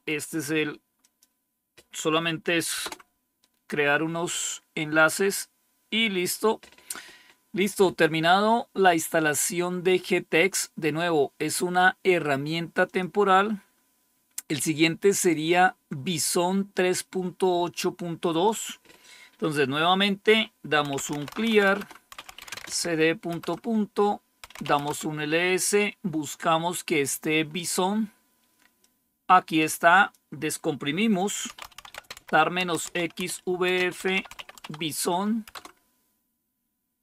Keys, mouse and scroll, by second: 0.9 click, 2.7 Return, 5.4-8.0 scroll down 1, 12.7-13.7 drag, 18.3-19.3 drag, 20.5-25.0 typing, 26.8-28.7 scroll up 1, 28.7-30.7 drag, 31.2-35.9 typing.